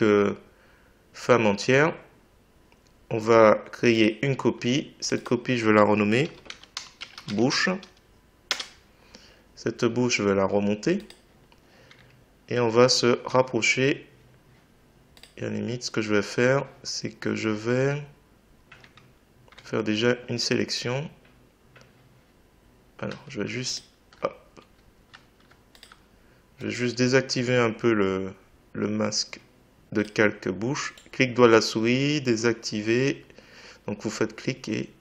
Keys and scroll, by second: 6.3 b.